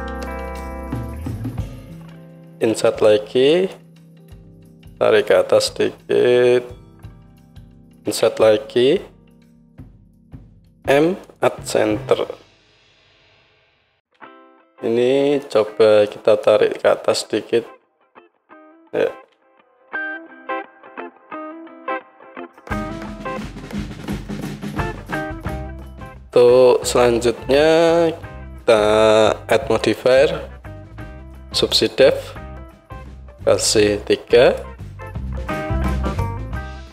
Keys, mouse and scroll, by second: 2.7 i, 3.8-5.4 middle drag, 5.4-9.5 drag, 9.1-9.5 scroll up 1, 9.5-13.4 middle drag, 10.7 m, 12.8 Tab, 13.4-20.0 right drag, 13.5 click, 13.5 middle click, 14.2 Tab, 15.5-20.0 drag, 15.5-20.0 middle drag, 19.3 Tab, 28.5-30.0 middle drag, 30.0 right click, 30.7-34.8 middle drag, 35.5 KP_1, 36.8 middle click.